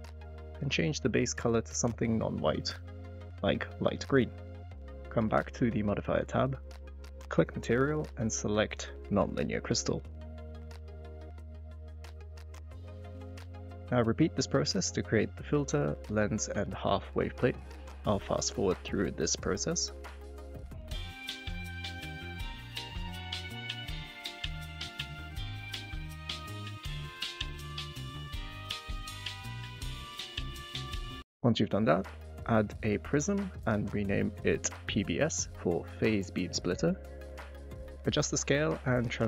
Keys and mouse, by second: 4.5 click, 6.8-8.4 drag, 11.7 click, 12.0 click, 12.3 click, 13.7 click, 14.1-14.7 typing, 15.3 click, 15.7 click, 16.1 click, 16.8 click, 17.1 shift+click, 18.5 click, 18.8 drag, 20.2 click, 20.9 click, 21.6 click, 21.7 ctrl+z, 22.0 shift+click, 22.5 click, 23.0 g, 23.1 y, 24.1 shift+click, 24.7 shift+click, 25.1 click, 25.4 click, 26.1 shift+click, 27.3 click, 28.2 shift+click, 28.7 shift+click, 29.3 g, 29.4 y, 29.4 x, 30.0-30.3 shift+drag, 30.5 click, 31.3 drag, 31.5 click, 32.4 click, 34.3-35.4 shift+drag, 35.9 click, 36.4 click, 38.4 click, 38.9-39.2 drag.